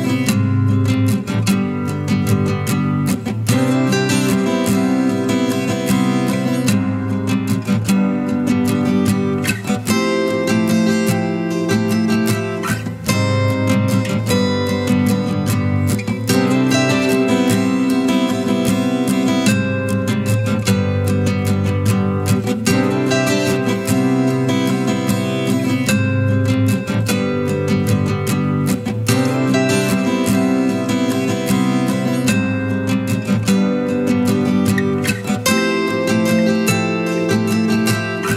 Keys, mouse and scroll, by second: 8.0 space, 11.5 space, 13.8 space, 20.1 space, 22.4-23.0 typing.